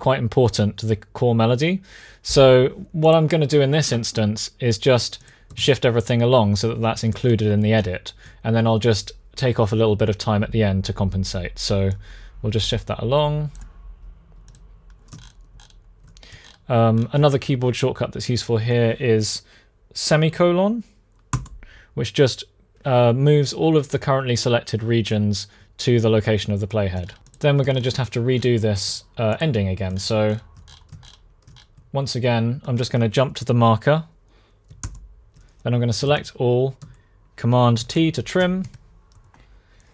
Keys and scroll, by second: 5.3 super+a, 21.0 ;, 34.5 alt+., 35.8 super+a, 37.5 super+t, 38.4 BackSpace.